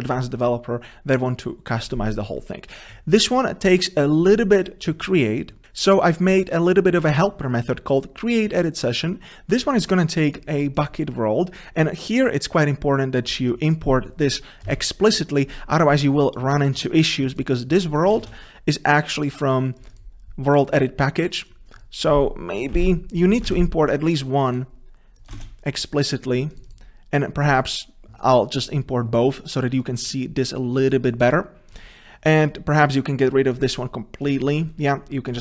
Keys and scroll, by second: 5.6 ctrl+v, 18.2 Delete, 18.3 ctrl+space, 22.8 ctrl+c, 23.5 ctrl+v, 25.5 ctrl+space.